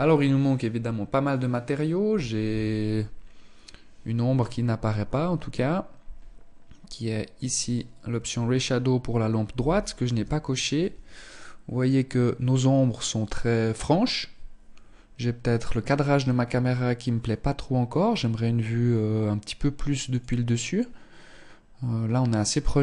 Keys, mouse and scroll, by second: 4.0 Escape, 6.4 click.